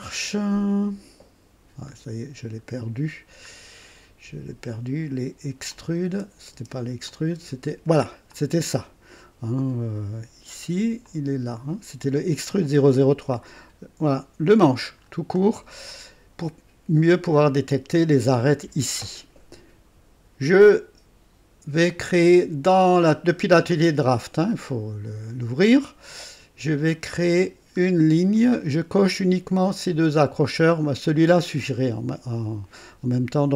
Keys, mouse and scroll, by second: 1.9-2.2 scroll up 2, 3.4-3.8 scroll up 2, 5.7 click, 6.1 space, 6.5 space, 7.0 click, 7.3 space, 8.3 click, 11.0 click, 12.9-14.9 drag, 15.0 scroll up 2, 15.5 right click, 18.0-18.4 scroll up 2, 18.4 right click, 20.8 click, 21.6 typing, 21.9 click, 27.2 click, 28.0 scroll up 2, 28.3 right click.